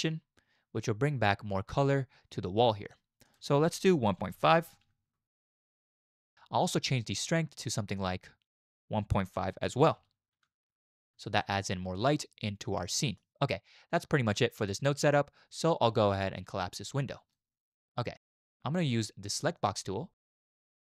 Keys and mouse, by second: 1.7-3.3 middle drag, 3.3-5.1 drag, 5.1 middle click, 5.2 click, 11.4 shift+middle drag, 13.0 shift+click, 14.4 click, 16.8 click, 19.6 click.